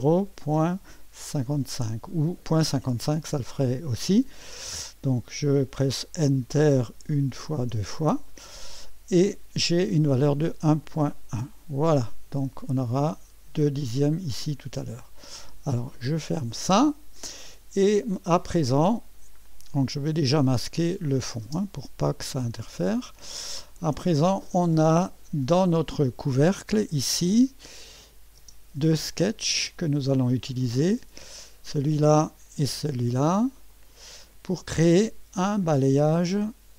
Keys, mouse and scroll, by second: 0.6 KP_Decimal, 1.3 KP_5, 1.5 KP_5, 7.1 Return, 7.6 Return, 9.6-10.8 scroll up 1, 10.8-11.9 drag, 15.1-15.4 scroll down 1, 16.2 click, 18.1-19.2 drag, 21.0 click, 21.5 space, 22.4 space, 23.9-26.9 scroll up 1, 28.0 click, 28.4 space, 29.1-30.2 drag, 31.4 click, 33.7 click.